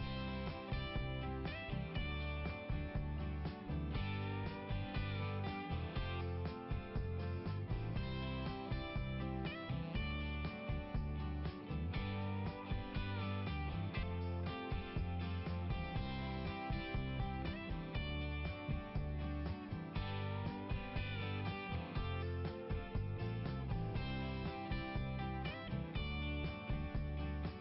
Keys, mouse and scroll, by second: 0.3-1.2 scroll down 1, 3.2-3.7 scroll down 1, 7.2 click, 9.5 click, 11.8 click, 14.5 click, 15.5 click, 17.0 click, 20.6 click, 22.2 click, 26.3 click, 26.7 click, 27.5 scroll down 1.